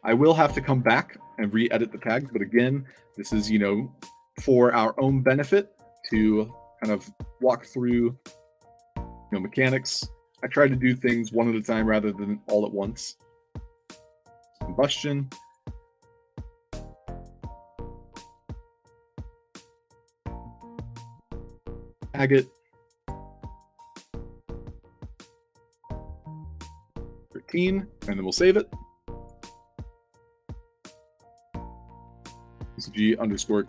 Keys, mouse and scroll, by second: 2.1 shift+c, 6.0 u, 7.2-8.7 typing, 9.0 click, 13.6 click, 14.1 click, 15.1 i, 15.4 click, 15.9 f, 17.8 click, 18.7 middle drag, 19.7 click, 20.0 ctrl+c, 20.1 click, 20.5 click, 20.9 scroll up 2, 21.4 click, 21.7 click, 22.9 click, 23.5 click, 23.8 ctrl+v, 25.1 click, 25.4 ctrl+v, 26.5 1, 27.4 s, 28.1 click, 29.1 click, 29.7 c, 30.8 click, 31.8 click, 32.7-33.6 typing.